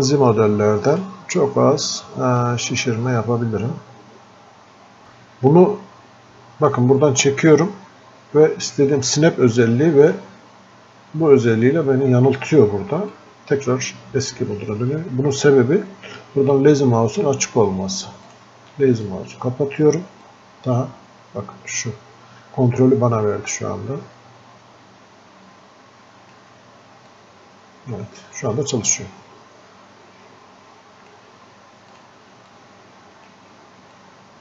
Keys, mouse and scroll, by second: 0.9-5.0 drag, 5.0 ctrl+z, 6.8-12.4 drag, 13.2-16.6 drag, 18.3-27.2 drag, 27.2-34.0 drag, 34.0 shift+click.